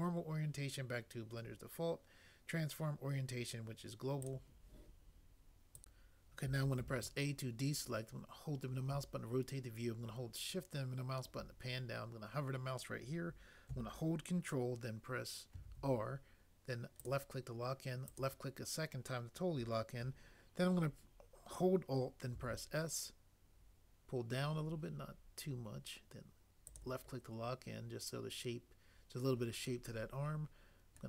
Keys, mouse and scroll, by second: 6.8 a, 15.6 ctrl+r, 22.4 alt+s.